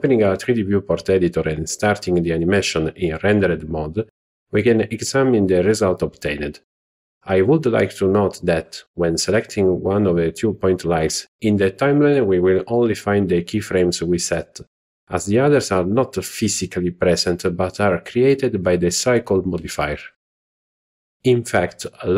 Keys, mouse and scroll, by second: 0.0 click, 1.4 z, 4.1 click, 13.9 click, 18.2 click, 19.1 z.